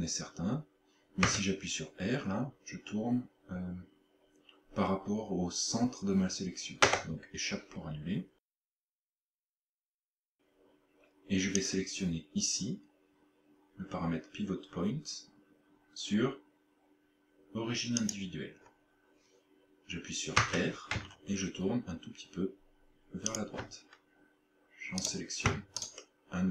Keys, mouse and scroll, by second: 1.3 r, 11.6 click, 20.4 r, 23.4 shift+click, 25.1 right click, 25.8 shift+right click.